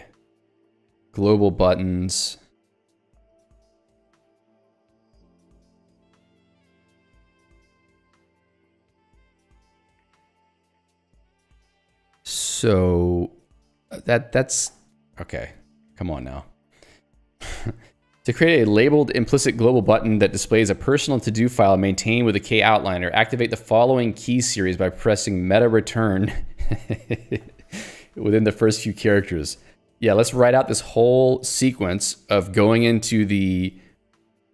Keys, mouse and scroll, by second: 1.0 ctrl+d.